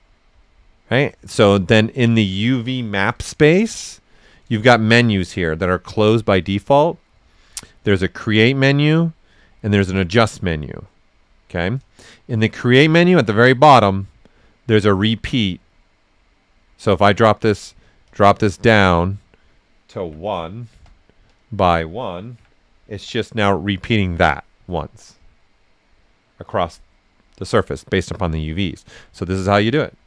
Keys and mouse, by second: 3.1 click, 3.7 click, 7.8 shift+click, 7.8 typing, 8.0 shift+click, 10.5 click, 18.0-20.0 drag, 18.0 typing, 20.0 1, 20.7 Return, 21.3 click, 22.3 1, 22.9 Return, 24.5 right click, 25.7-28.5 right drag, 29.3 click, 29.3 typing.